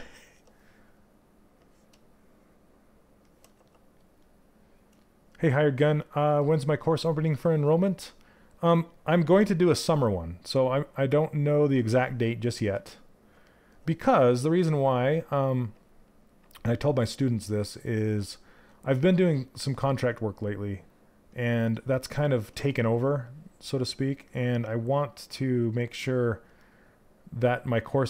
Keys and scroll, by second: 8.9 w.